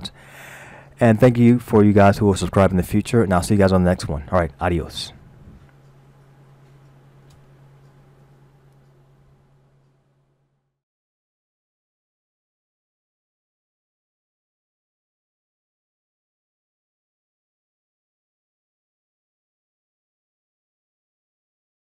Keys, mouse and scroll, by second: 1.0-2.1 scroll up 2, 7.2 Escape.